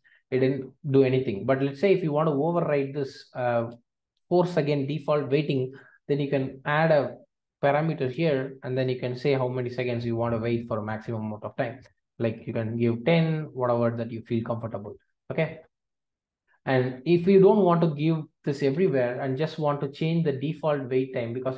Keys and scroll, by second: 8.1 Return, 18.6 ctrl+alt+o.